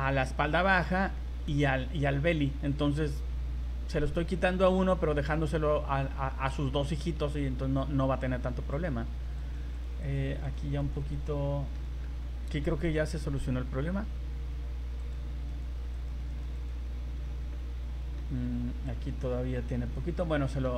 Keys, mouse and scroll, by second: 0.5 right click, 1.2 middle click, 2.0 right click, 4.7 right click, 8.5 v, 8.7 right click, 9.4 right click, 9.8 right click, 10.0 right click, 10.5 right click, 10.8 right click, 11.1 right click, 11.4 middle click, 12.6 a, 13.0 a, 15.0 click, 15.5 right click, 16.0 right click, 16.4 right click, 16.5 right click, 17.2 scroll down 3, 17.5 middle click, 18.3 scroll up 2, 19.9 middle click.